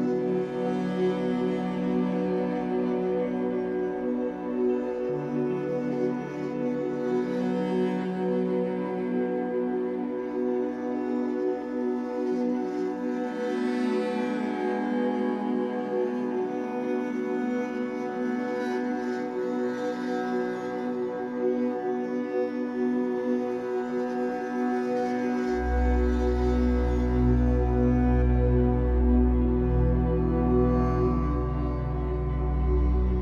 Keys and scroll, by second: 0.2 0, 0.4 Return, 2.8 Escape, 4.0 2, 5.1 shift+w, 6.2 Escape, 18.2 3, 19.7 shift+Tab, 20.3 2, 21.0 alt+c, 24.2 Escape, 24.7 2, 26.3 shift+Tab, 26.7 Escape, 28.1 2, 29.0 w, 31.6 Escape.